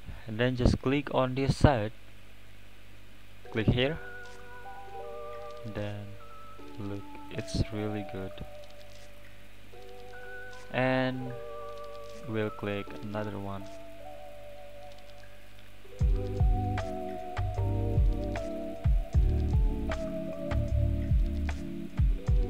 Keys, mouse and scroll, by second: 0.0-0.9 scroll up 1, 0.9 click, 7.4-10.2 drag, 10.2-10.7 middle drag, 10.7 scroll down 4, 12.3 click, 13.3-14.4 drag, 17.7 click, 18.3-21.0 drag.